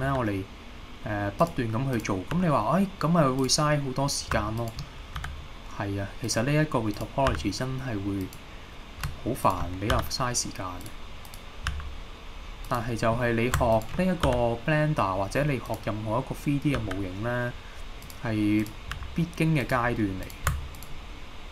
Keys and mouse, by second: 0.1 e, 1.4 click, 2.0 click, 2.4 g, 3.4-4.4 drag, 5.2 e, 6.3 click, 7.0 click, 7.3 g, 8.3 click, 10.0 e, 10.8 click, 11.3 click, 11.7 g, 12.7 click, 13.8 shift+click, 14.3 e, 15.7 click, 16.8 e, 18.1 click, 18.6 click, 19.0 g, 19.6 click, 20.3 click, 20.8 shift+click.